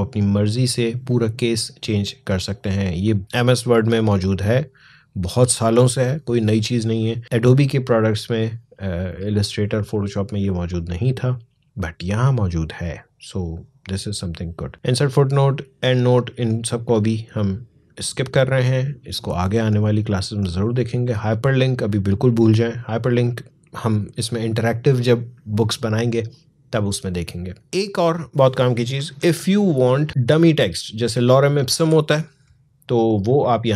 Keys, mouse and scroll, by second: 7.2 click, 27.9 click, 29.1 alt+scroll down 1, 30.1-31.5 drag, 31.5 Delete.